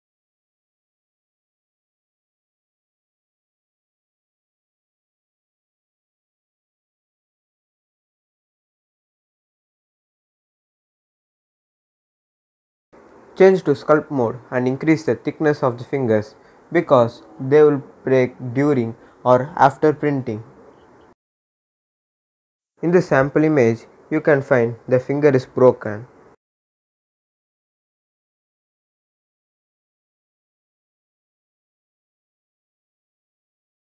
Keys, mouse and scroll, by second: 2.2 scroll down 1, 3.4 click, 4.3 scroll up 1, 5.6 click, 9.1-12.3 drag, 12.3-13.9 scroll up 1, 13.9-16.0 drag, 16.0-19.0 scroll down 1, 19.0 click, 20.3 scroll up 1, 21.9-33.9 drag.